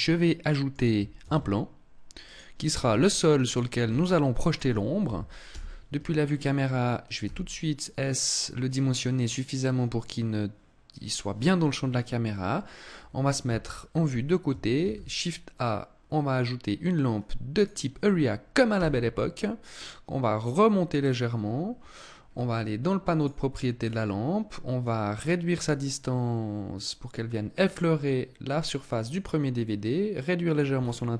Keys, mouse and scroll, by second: 0.6 shift+a, 2.3 s, 2.9 click, 3.3 s, 3.9 click, 4.9 KP_0, 6.6 s, 8.3 click, 12.8 KP_3, 14.2 shift+a, 18.3 g, 20.5 click, 21.1 scroll down 3, 21.7-22.2 scroll up 3, 22.6 click, 23.2-23.5 scroll down 2, 24.2 click, 29.0 click, 30.2-30.7 scroll down 6.